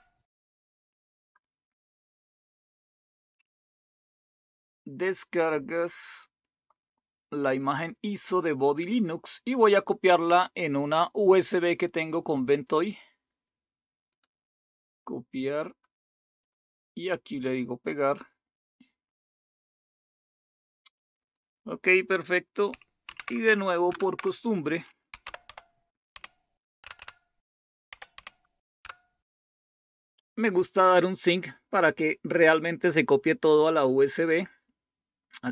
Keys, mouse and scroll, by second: 3.2 click, 3.9 click, 4.2 click, 7.5 click, 12.6 right click, 14.1 click, 15.4 click, 16.3 right click, 17.3 click, 21.1 click, 23.1 super+w, 23.8 super+Return, 24.8-28.6 typing, 28.8 Return.